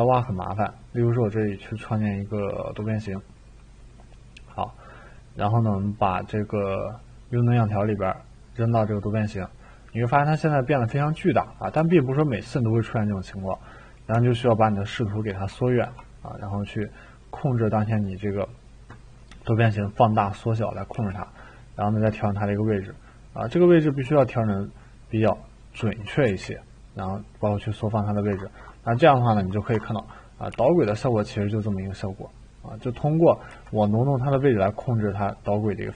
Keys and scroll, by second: 10.8-14.9 typing, 21.0 e, 24.0 t, 26.2 e, 30.5 t, 33.5 e.